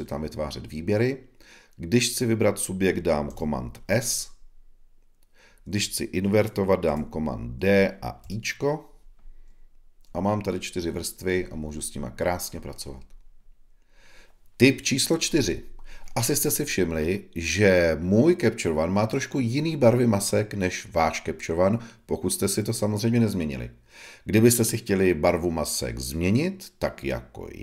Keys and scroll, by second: 3.2 super+s, 6.8 super+d.